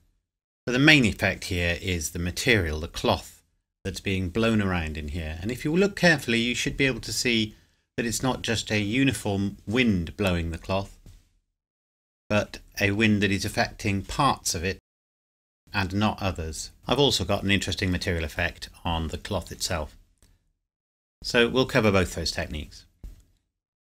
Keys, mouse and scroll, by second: 16.8 click.